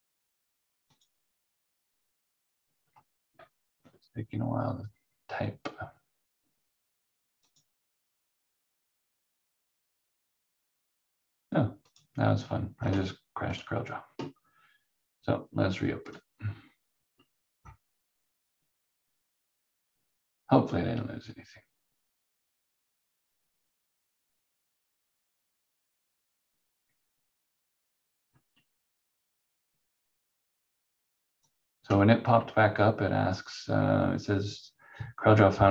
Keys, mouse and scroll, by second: 7.4 click, 11.8 click, 31.4 click.